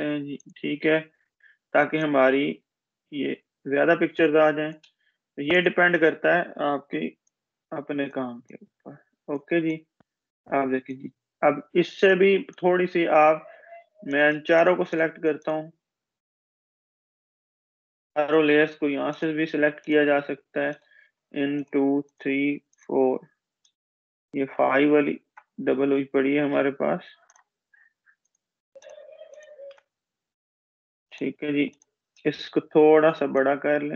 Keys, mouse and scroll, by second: 17.3 click, 18.8 click, 24.5 click, 24.9-26.3 scroll up 2, 26.3 ctrl+Delete, 27.4 click, 30.2 Delete, 31.3 click, 33.2-33.9 drag.